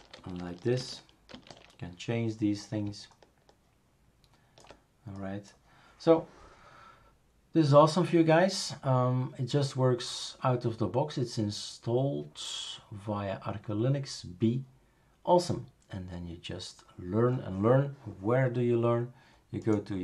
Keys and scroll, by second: 0.2 shift+super+space, 0.8 shift+super+space, 1.3 shift+super+space.